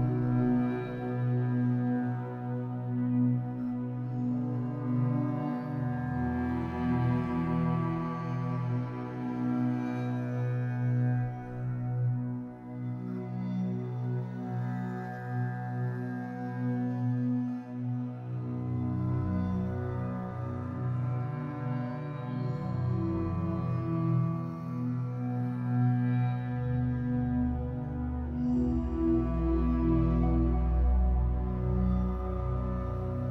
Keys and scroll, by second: 0.6 ctrl+z, 4.5 ctrl+z, 26.1 space, 30.7 ctrl+i.